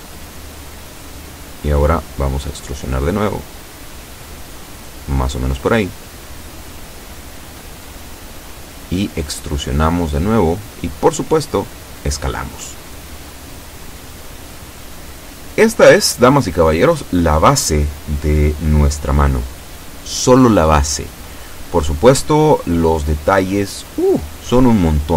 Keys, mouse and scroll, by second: 1.5 e, 3.8 click, 5.0-6.2 drag, 7.4 e, 9.8 click, 10.7 s, 12.1 click, 13.4-13.7 scroll down 1, 14.6-16.5 shift+middle drag, 19.8-21.7 shift+middle drag.